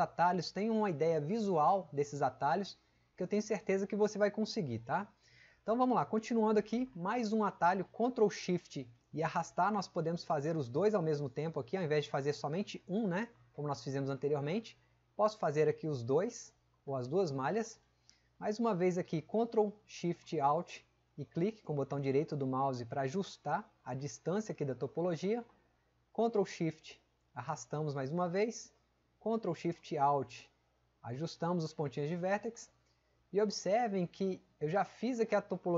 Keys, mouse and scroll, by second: 8.9-15.9 ctrl+shift+drag.